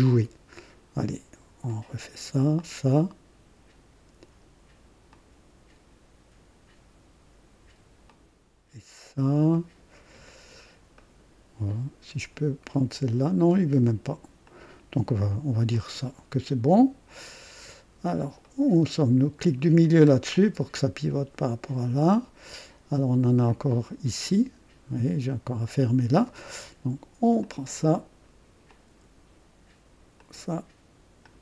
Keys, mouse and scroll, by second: 0.0 click, 1.6 click, 2.6 click, 5.1 click, 8.0 click, 8.9 scroll down 1, 9.5 right click, 10.2 right click, 10.9 right click, 14.4 click, 15.7-18.3 drag, 18.4 right click, 19.8 middle click, 20.3-23.4 drag, 23.5 right click, 27.4 click, 28.6 click, 30.1 click, 31.2 click.